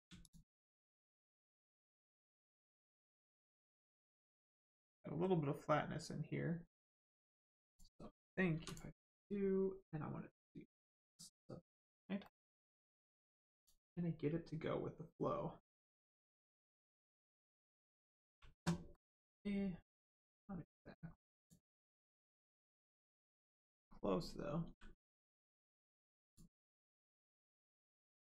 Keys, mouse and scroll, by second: 0.2 shift+click, 2.2 middle click, 3.0 shift+middle click, 3.6 middle click, 3.6 middle click, 4.1 shift+middle click, 7.6 click, 8.5 2, 8.6 click, 9.0 right click, 12.2 middle click, 13.5 click, 15.9 click, 18.9 middle click, 19.9 click, 21.8-22.8 scroll up 1, 23.0 shift+middle click, 23.3 scroll up 1, 24.6 g, 26.2 click, 26.6 middle click, 27.3-27.9 scroll down 1.